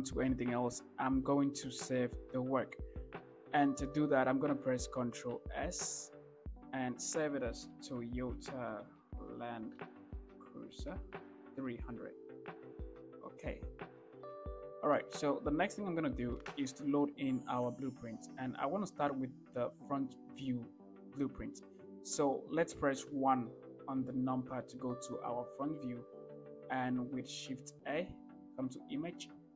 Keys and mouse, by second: 5.7 ctrl+s, 23.4 KP_1, 27.8 shift+a.